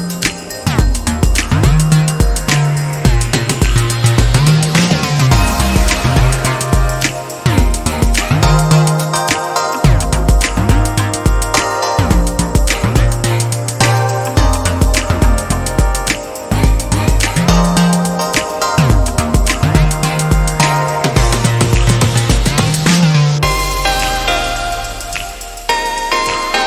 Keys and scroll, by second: 14.8 ctrl+[, 15.5 ctrl+[, 17.4 ctrl+t, 25.6 ctrl+z.